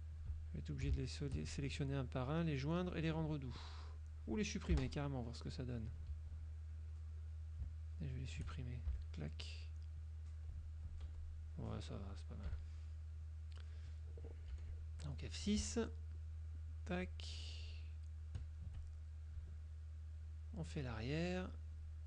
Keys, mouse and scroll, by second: 0.6 shift+click, 1.2 shift+click, 2.2 click, 3.0 click, 4.7 click, 4.8 Delete, 6.2 ctrl+z, 6.8 ctrl+click, 8.2 shift+click, 8.4 shift+right click, 9.0 shift+Delete, 10.8 ctrl+click, 11.2 ctrl+F1, 11.3 ctrl+click, 12.6 KP_Subtract, 13.3 click, 14.6 F6, 14.8 click, 16.3-16.9 shift+drag, 17.2 shift+click, 17.8 shift+click, 18.4 shift+click, 19.0 shift+click, 20.3 shift+click, 21.0 shift+click, 21.6 shift+click.